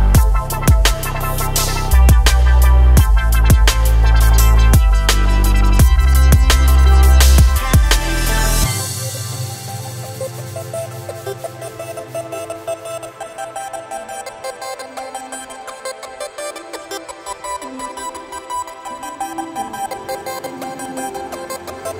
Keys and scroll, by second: 1.4 s, 8.3 Tab, 12.3 KP_7, 16.6 Tab.